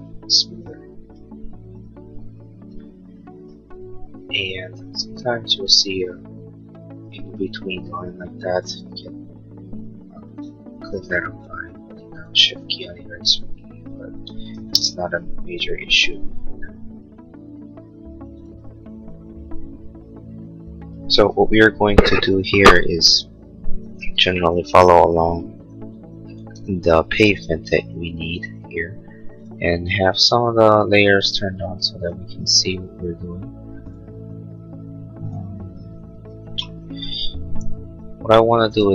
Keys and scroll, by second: 10.6 e, 14.6 ctrl+z, 15.3 Escape, 26.6 l, 37.6 l.